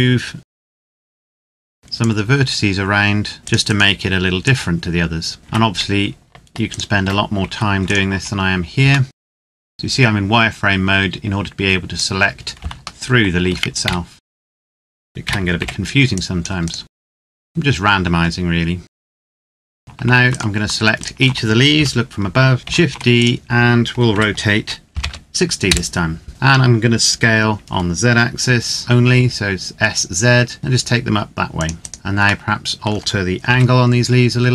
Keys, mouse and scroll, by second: 0.4-0.8 scroll up 2, 0.5 ctrl+z, 0.8 right click, 1.0 shift+right click, 1.2 click, 1.4 middle click, 2.0 click, 2.6-3.4 scroll up 1, 3.4 click, 5.4 Tab, 6.6 alt+right click, 8.9 middle click, 9.1 click, 9.2 scroll up 1, 9.3 ctrl+\, 9.4 Escape, 9.5 ctrl+z, 9.5 a, 9.6 click, 12.8 shift+middle click, 13.6 a, 14.3 c, 14.4 right click, 14.6 Tab, 14.7 right click, 14.8 Tab, 15.0 a, 15.9 click, 16.3 right click, 16.8 middle click, 16.9 scroll down 1, 17.1 c, 17.2 right click, 17.3 click, 17.4 scroll up 1, 19.0 Tab, 19.2 middle click, 19.3 z, 19.6 middle click, 20.2 shift+right click, 21.6 KP_7, 22.6 shift+d, 22.9 click, 23.9 r, 24.8 KP_6, 24.9 KP_0, 25.5 KP_Enter, 26.3 middle click, 27.4 s, 28.8 z, 31.2 click, 31.6 scroll down 1, 31.8 right click, 32.3 middle click, 33.4 r.